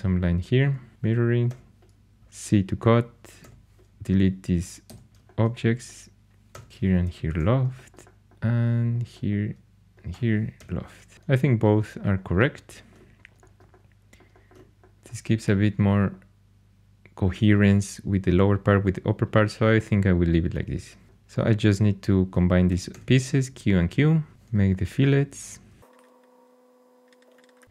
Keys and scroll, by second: 0.9 alt+x, 1.4 2, 2.2 c, 3.3 4, 4.8 x, 6.5 3, 7.0 i, 10.5 l, 21.0 4, 22.7 typing, 24.3 2, 27.2 shift+super+e.